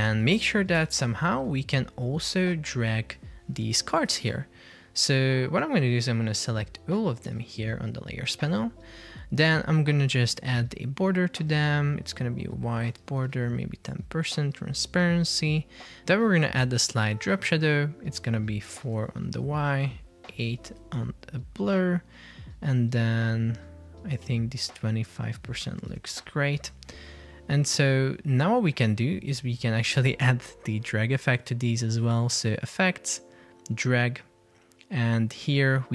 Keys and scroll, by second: 0.9 super+p, 4.4 Escape.